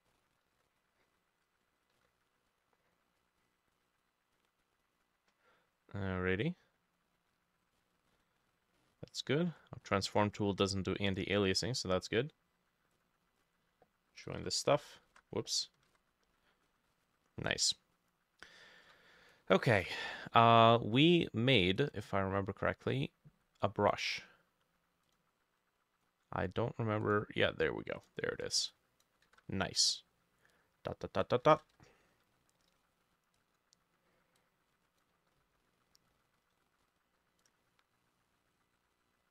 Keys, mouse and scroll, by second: 0.1-0.5 scroll down 4, 0.6 Return, 2.0 ctrl+u, 8.1-8.8 scroll up 5, 8.8 middle click, 8.9-9.6 scroll up 2, 9.6-10.2 scroll down 10, 10.2 scroll up 3, 10.6-11.0 scroll down 2, 11.0 middle click, 11.3-13.3 scroll up 1, 13.4 shift+click, 14.4 ctrl+j, 15.2 ctrl+z, 16.3 ctrl+e, 16.7-17.0 scroll up 1, 17.0-17.3 scroll down 1, 17.3 middle click, 18.9 b, 19.8 ctrl+z, 29.3 ctrl+z, 31.4 ctrl+middle click, 31.5 ctrl+z, 36.8-39.3 drag, 36.8-37.5 v, 37.5-39.3 shift+middle drag.